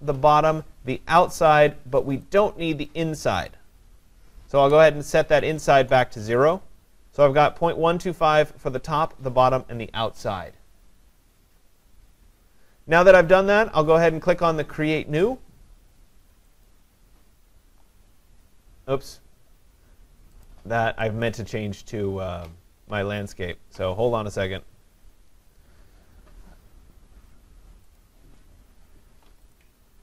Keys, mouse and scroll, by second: 2.4 click, 3.5 click, 5.2 0, 5.8 Tab, 16.7 click, 20.5 click, 21.3 click, 28.0 click, 29.5 click.